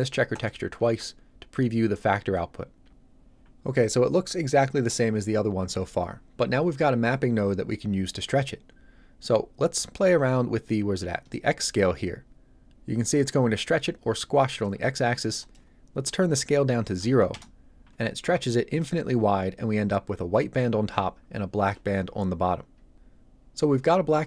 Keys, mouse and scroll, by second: 11.3 shift+click, 15.4 click, 16.9 KP_0, 17.3 Return.